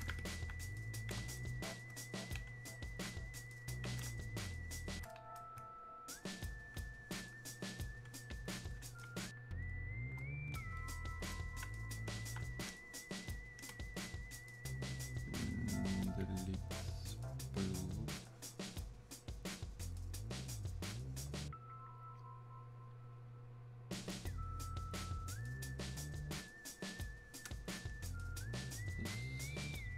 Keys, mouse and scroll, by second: 0.3 shift+click, 3.1-4.6 alt+drag, 6.1-9.6 ctrl+shift+drag, 12.3-13.7 alt+drag, 13.7 space, 17.3 click, 27.0 click, 27.1 space, 28.3 click.